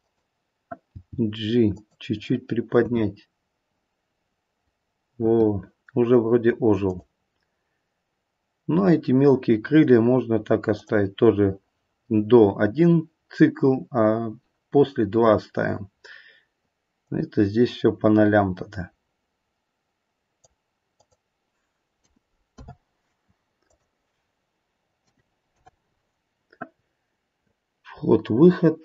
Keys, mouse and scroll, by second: 0.9 g, 2.7 space, 5.2 space, 6.8 click, 10.7 click, 17.0 click, 20.9 click, 23.6 click.